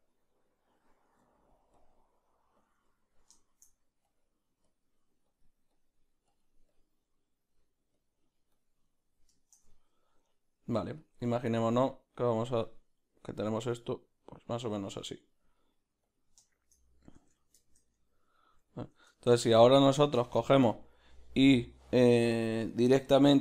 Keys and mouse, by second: 0.3 click, 1.9 q, 2.6 click, 2.8 click, 2.9 ctrl+middle click, 3.4 shift+middle click, 4.0 click, 7.0 middle click, 7.9-11.0 drag, 8.8 middle click, 9.4 shift+middle click, 9.7 ctrl+middle click, 10.3 middle click, 11.0 middle click, 11.0 f, 11.6-16.5 drag, 15.1 middle click, 16.5-23.4 shift+middle drag, 17.3 Tab.